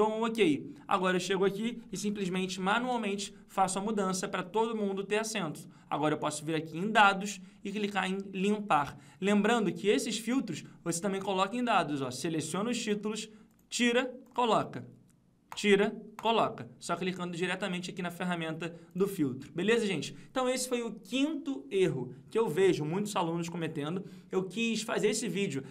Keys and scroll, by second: 2.4 ctrl+c, 3.0 ctrl+v.